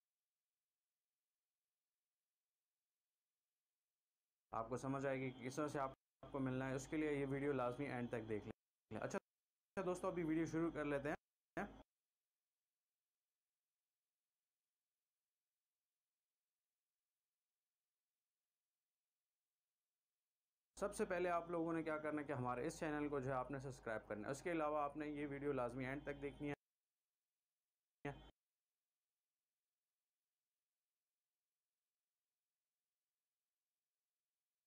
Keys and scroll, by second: 2.1 v, 3.9 shift+Delete, 4.5 space, 5.9 space, 8.5 space, 11.1 space, 12.8 c, 18.7 v, 20.3 shift+Delete, 20.7 space, 26.5 space, 28.0 space, 28.8 c, 32.7 v.